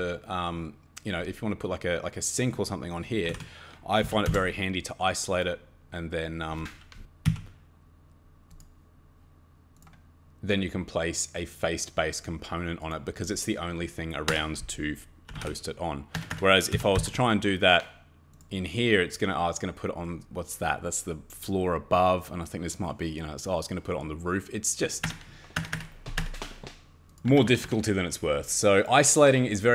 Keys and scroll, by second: 3.0-4.7 typing, 7.2 d, 14.3 Escape, 15.0-17.4 typing, 16.1 Escape, 16.3 Escape, 25.1 Escape, 25.6 Escape, 25.7 Escape, 26.2 Escape, 27.3 Escape, 27.5 Escape, 27.6 Escape.